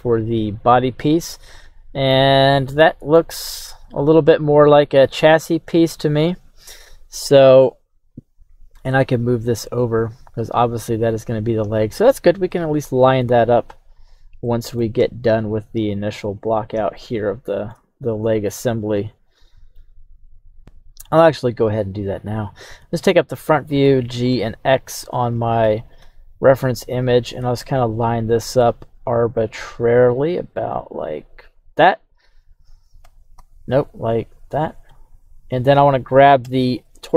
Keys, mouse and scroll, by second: 3.5 KP_1, 6.0-6.5 scroll down 1, 8.0-11.2 scroll down 1, 12.5 middle click, 13.9 click, 14.4 middle click, 15.0 KP_3, 16.9 shift+middle click, 18.4-19.8 middle drag, 20.6 right click, 25.1 right click, 25.6 g, 26.0 x, 31.6-33.1 right drag, 33.1 g, 33.3 x, 34.9 click, 35.4 right click, 36.4 g.